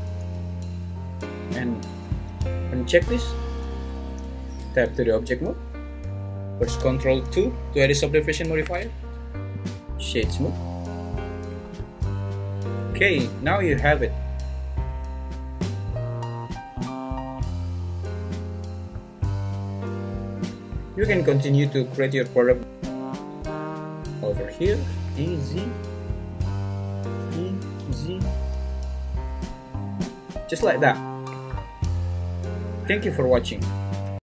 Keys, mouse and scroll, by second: 1.3-3.7 drag, 4.0 Tab, 4.0 ctrl+z, 8.6 ctrl+2, 11.5 `, 13.5 `, 17.3 Tab, 24.9 e, 25.1 s, 26.3 click, 27.2 e, 27.8 z, 29.7 click.